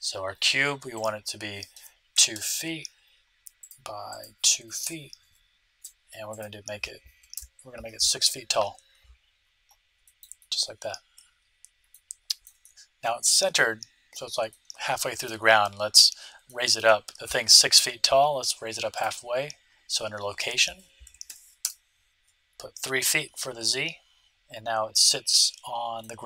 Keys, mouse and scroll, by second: 0.9-2.6 drag, 4.0-5.8 drag, 6.3-8.0 drag, 9.3-12.0 middle drag, 12.2-14.2 middle drag, 14.4-18.1 middle drag, 18.9-20.6 drag, 20.7 click, 23.6-25.4 middle drag.